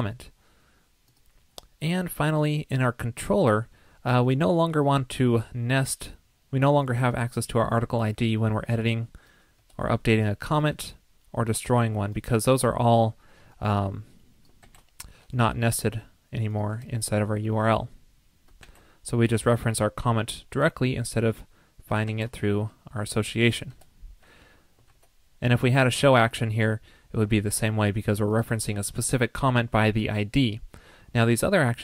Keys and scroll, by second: 24.9 super+s.